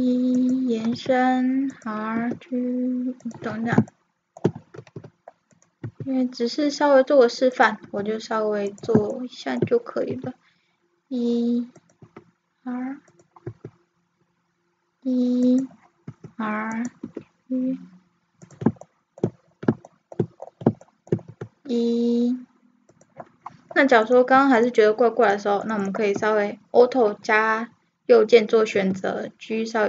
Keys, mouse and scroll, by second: 1.0 r, 2.2 g, 4.0 middle click, 5.0 r, 5.8 e, 7.9 r, 9.2 middle click, 10.1 e, 12.1 r, 13.5 e, 16.1 r, 17.1 g, 18.9-19.9 middle drag, 20.1 middle click, 20.5 middle click, 21.3 e, 24.0-27.8 right drag, 28.7 g.